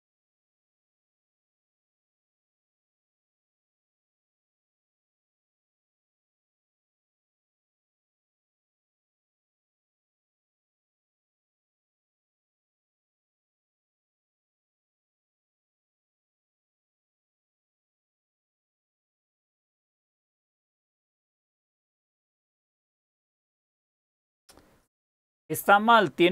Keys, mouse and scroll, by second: 0.0-3.9 typing, 4.7 Return, 7.7 ctrl++, 7.7 typing, 8.1 ctrl++, 8.6-10.7 ctrl++, 10.1-12.0 typing.